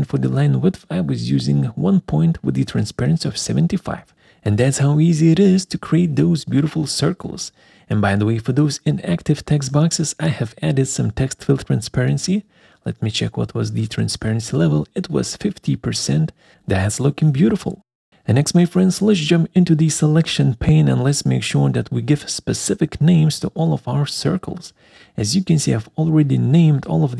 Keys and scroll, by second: 13.5 alt+4.